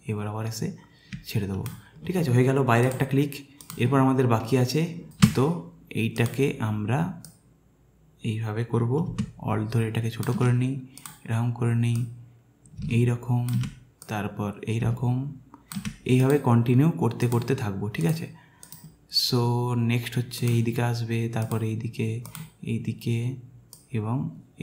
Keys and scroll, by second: 5.1 space.